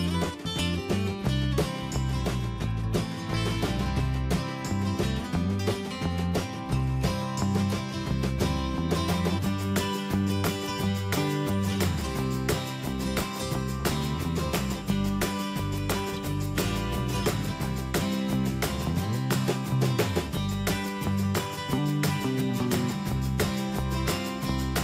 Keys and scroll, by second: 0.0 ctrl+a, 5.6 ctrl+Return, 6.0 ctrl+a, 6.5 ctrl+shift+., 13.0 Return, 14.3 ctrl+shift+., 22.0 ctrl+a.